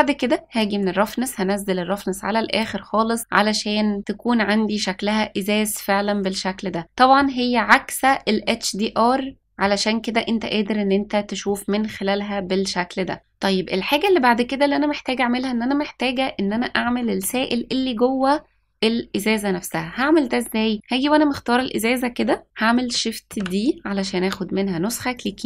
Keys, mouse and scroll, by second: 0.5-2.6 drag, 4.0-7.1 middle drag, 9.4 middle click, 11.4-13.2 middle drag, 15.6-16.3 scroll up 1, 16.5-16.8 shift+middle drag, 23.3 shift+d.